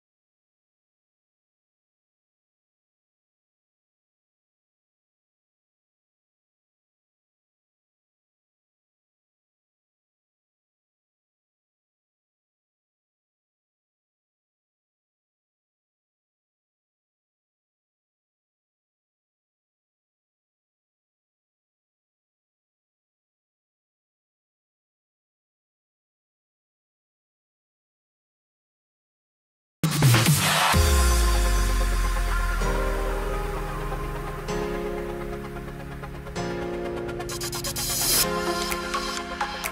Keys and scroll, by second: 27.4 3, 28.7-29.2 typing, 30.9 3.